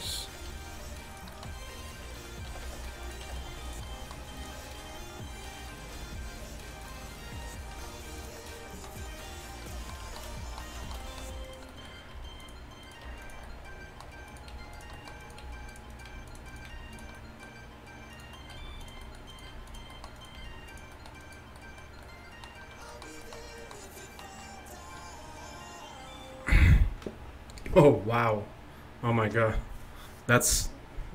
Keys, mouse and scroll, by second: 0.4 g, 2.5 g, 3.3 g, 6.0 g, 7.8 r, 11.5-13.5 middle drag, 12.2 g, 13.1 g, 13.7 middle click, 14.6 g, 15.5 g, 16.1 g, 16.7 g, 18.6 g, 19.6 g, 20.4 g.